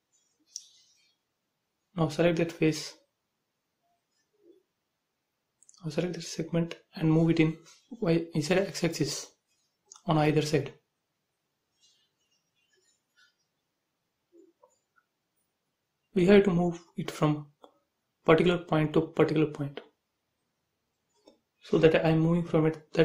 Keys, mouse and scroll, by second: 0.1 shift+click, 0.6-2.1 middle drag, 2.1 click, 2.6 shift+click, 4.3-5.6 middle drag, 5.6 m, 6.4 ctrl+click, 6.7 scroll down 1, 7.9 Right, 9.1 click, 9.2 space, 9.5 middle click, 11.0 click, 12.3 ctrl+z, 12.6 middle click, 13.5-14.1 scroll down 1, 14.1 click, 14.5 shift+middle click, 15.3 shift+click, 16.7 shift+click, 18.7-19.1 scroll down 1, 19.1 middle click, 19.8-20.5 scroll up 1, 21.7 m, 22.5 ctrl+click, 22.7 scroll down 1.